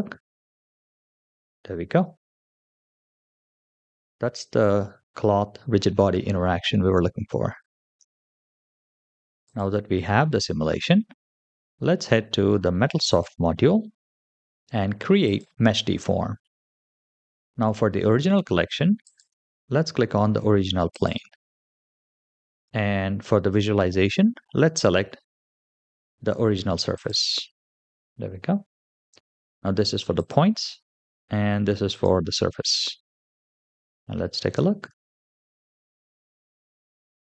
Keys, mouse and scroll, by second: 7.8 space, 9.3 click, 13.0 click, 15.1 click, 16.4-18.2 scroll down 3, 18.9-21.0 drag, 26.9 click, 30.0 click, 31.8 click, 34.3 space.